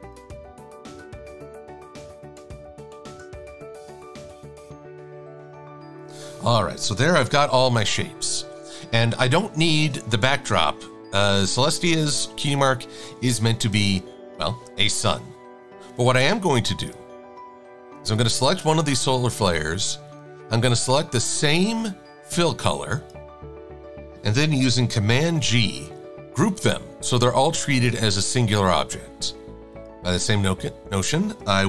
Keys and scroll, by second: 7.6 super+-, 11.1 v.